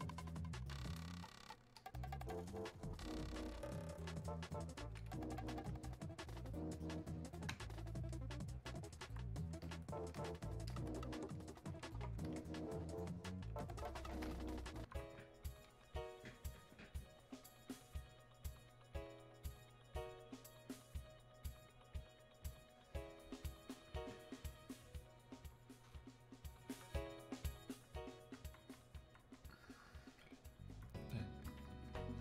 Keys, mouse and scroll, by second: 8.1-14.7 drag.